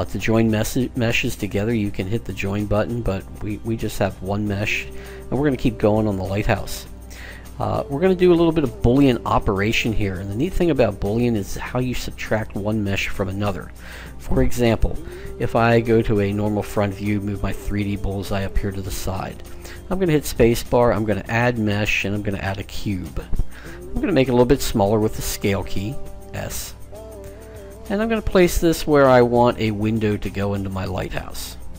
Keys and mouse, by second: 15.6 KP_1, 16.6-20.0 drag, 19.4 space, 24.9 s, 28.8 g.